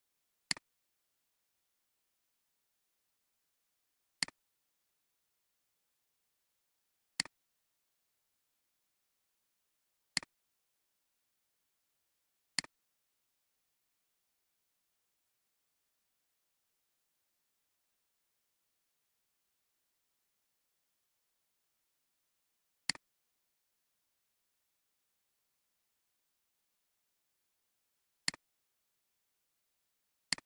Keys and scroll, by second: 16.7-18.2 typing, 20.2 d, 20.2 space, 26.2 Caps_Lock.